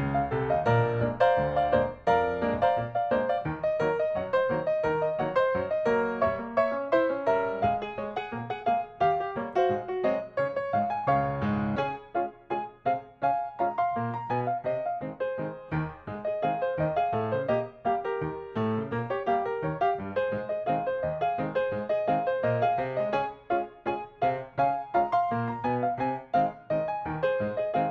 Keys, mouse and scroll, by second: 0.9 middle click, 1.5 click, 2.1 s, 2.9 click, 3.6 KP_0, 3.8 KP_Decimal, 4.8 middle click, 5.8 click, 7.5 click, 9.0 middle click, 9.9 space, 10.1 click, 10.3 scroll down 1, 10.5 shift+middle click, 10.9 click, 11.5 shift+middle click, 12.2 m, 13.2 ctrl+click, 15.6 right click, 17.4 click, 17.7-18.0 scroll up 1, 18.7 m, 19.9 click, 22.1 middle click, 22.8 click, 23.1 middle click, 23.6 shift+middle click, 23.7 scroll, 23.8 middle click, 24.2 click, 24.5 middle click, 25.3-25.7 typing, 25.9 click, 26.3 scroll down 1, 26.5-27.9 middle drag.